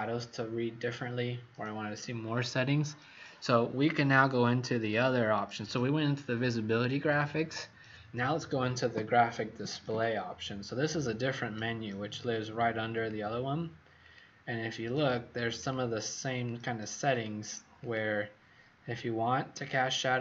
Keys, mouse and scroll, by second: 15.5 click, 16.3 click, 17.8 click, 19.5 click.